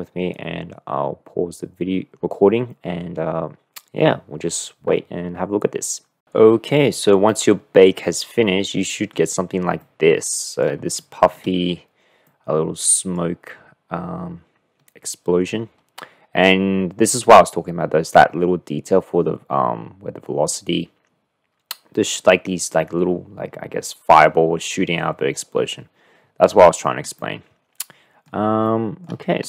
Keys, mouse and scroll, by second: 7.4 drag, 7.6-9.5 middle drag, 10.1-10.9 middle drag, 11.3 shift+middle click, 12.7-13.6 drag, 27.2-28.3 middle drag, 28.3 click, 28.5-29.2 shift+middle drag.